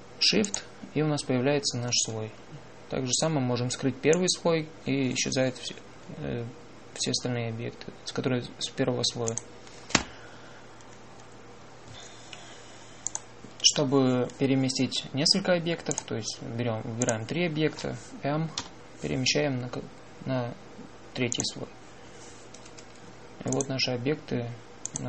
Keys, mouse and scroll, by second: 1.3-3.3 drag, 5.0-6.9 drag, 10.2-12.1 drag, 14.0-15.9 drag, 19.5 m, 19.8-22.7 drag.